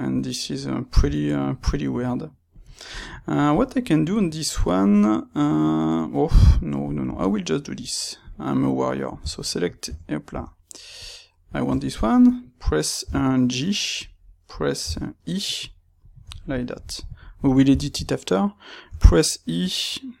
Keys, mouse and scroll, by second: 0.8 g, 3.4 click, 7.0 Tab, 7.4 middle click, 8.1 click, 8.5-10.8 middle drag, 9.1 Tab, 10.8 click, 11.6 Tab, 13.0 g, 14.0 click, 14.8 e, 15.6 click, 16.2-20.2 shift+middle drag, 18.8 e.